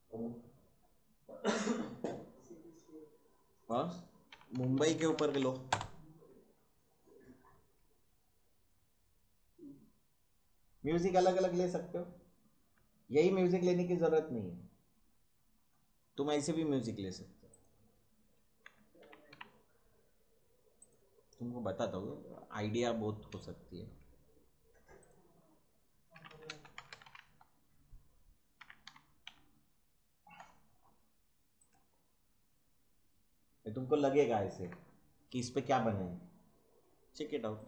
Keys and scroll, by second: 4.1-5.8 typing, 18.4-19.8 typing, 25.9-29.7 typing.